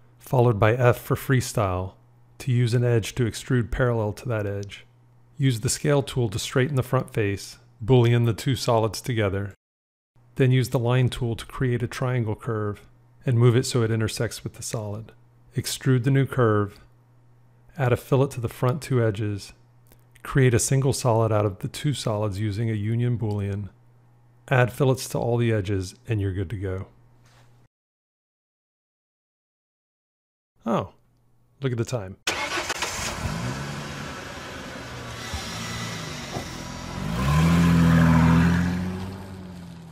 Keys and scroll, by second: 5.6 s, 8.4 q, 14.6 g, 22.1 q.